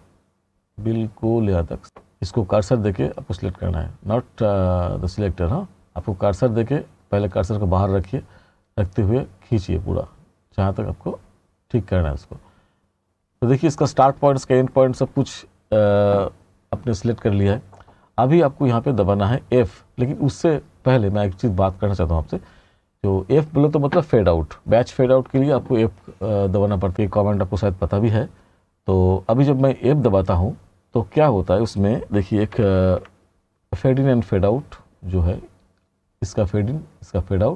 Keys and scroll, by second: 32.6 t.